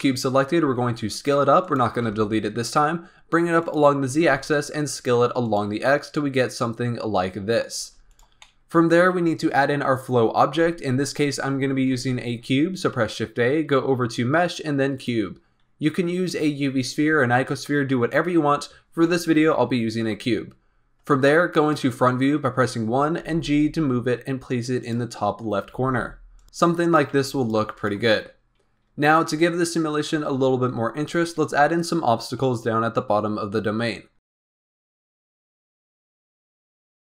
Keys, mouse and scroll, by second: 0.6 s, 1.9 g, 4.0 s, 5.8-7.7 middle drag, 7.7 s, 8.4-11.4 middle drag, 11.9 shift+a, 18.9 KP_1, 19.8 z, 20.6-21.2 scroll up 4, 21.2-23.1 shift+middle drag, 23.1 g, 25.7 g, 26.4 g, 27.0 s, 27.5 g, 33.1-34.3 scroll up 2, 34.3 shift+d, 35.0 s, 35.6 middle click, 36.1 KP_1, 36.4 g.